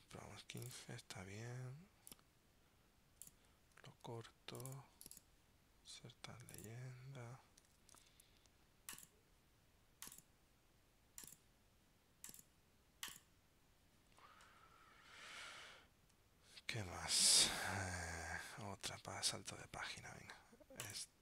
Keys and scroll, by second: 4.2 super+x, 8.1 super+v, 15.7 super+Tab, 19.0 super+Tab.